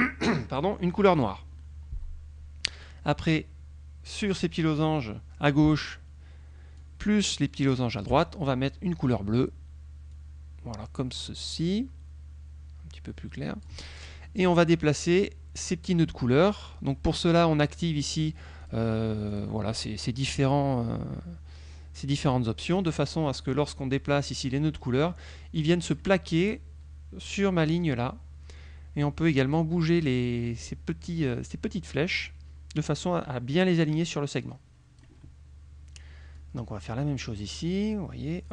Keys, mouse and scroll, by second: 1.2 click, 2.9-4.5 drag, 6.9-8.0 shift+drag, 10.2-13.9 drag, 18.2 click, 18.7 click, 19.4 click, 22.8 click, 24.1-26.2 drag, 31.1 middle click, 32.0-33.2 drag, 34.5 click, 36.4-37.7 drag, 38.1 click.